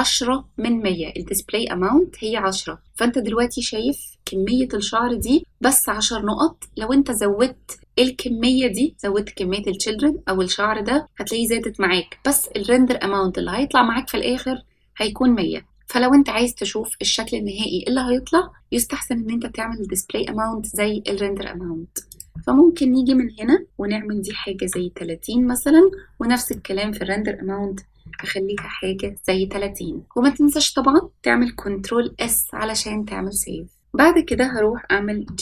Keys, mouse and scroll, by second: 22.0-28.5 drag, 32.0 ctrl+s, 33.8 middle click, 33.8 click, 35.2 g.